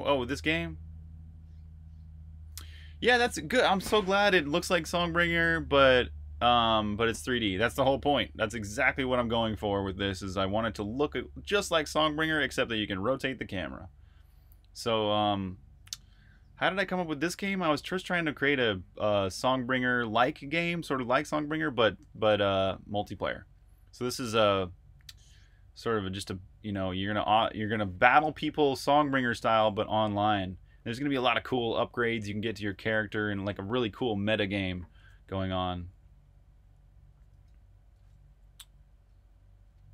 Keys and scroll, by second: 37.1 super+Tab, 37.9 super+Tab.